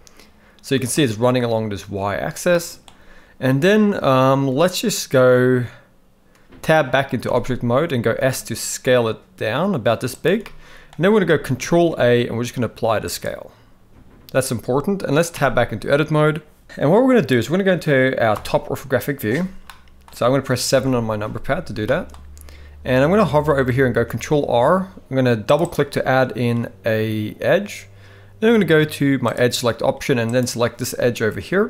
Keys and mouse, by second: 2.5 middle click, 7.3 Tab, 8.0 s, 10.4-10.9 middle drag, 11.7 ctrl+a, 15.3 Tab, 19.7 middle click, 20.7 KP_7, 21.8 shift+middle click, 23.9 ctrl+r, 29.3 click.